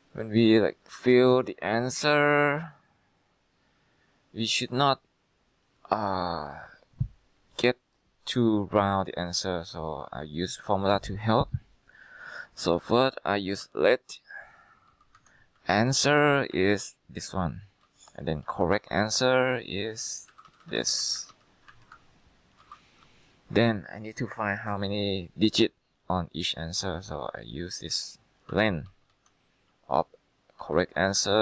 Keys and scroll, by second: 12.9-20.7 typing, 15.2 Tab, 16.6 Left, 16.8 Left, 21.4 ctrl+Right, 21.8 ctrl+Left, 22.5-23.2 typing, 28.4-31.4 typing.